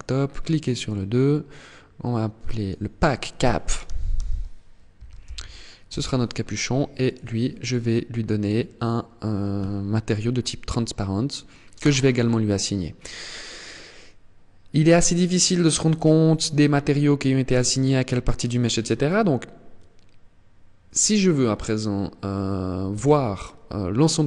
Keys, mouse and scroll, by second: 6.5 click, 11.3 click, 22.4 a.